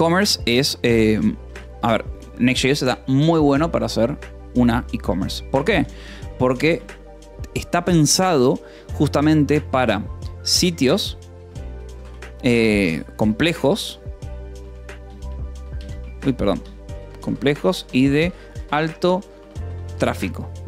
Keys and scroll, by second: 0.0-0.7 typing, 1.0 Escape, 2.0 ctrl+s, 5.0-6.7 typing, 10.4 s, 11.4 t, 11.7 i, 11.9 space, 13.1-20.6 typing.